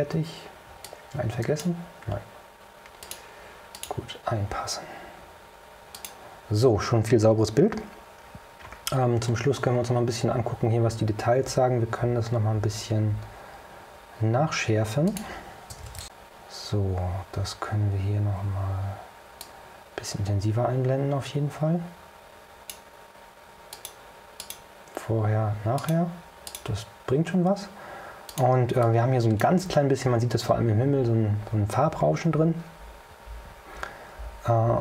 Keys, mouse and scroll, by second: 1.0 click, 3.1 click, 3.8 click, 6.0 click, 9.5-10.1 scroll up 3, 14.5 click, 19.5-23.0 drag, 23.8 click, 24.5 click, 25.9 click, 26.6 click, 28.4 click, 28.9-29.8 drag.